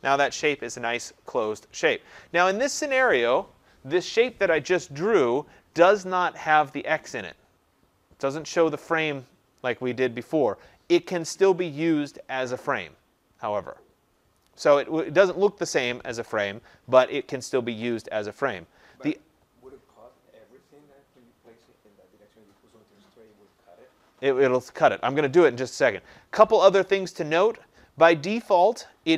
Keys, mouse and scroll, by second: 3.5 click.